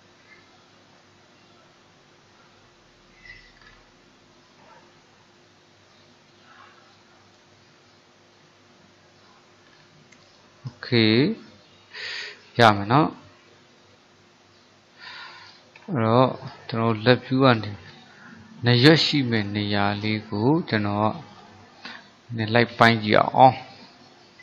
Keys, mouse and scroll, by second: 3.7-4.3 scroll down 4, 4.3-7.3 middle drag, 7.7-9.8 middle drag, 9.8-10.5 scroll up 3, 10.5-14.1 shift+middle drag, 15.8 ctrl+KP_3, 17.2 shift+middle click, 18.0 scroll down 1, 18.2-19.6 scroll up 3, 19.6 shift+middle click, 20.4-21.4 scroll up 1, 21.5-24.4 drag.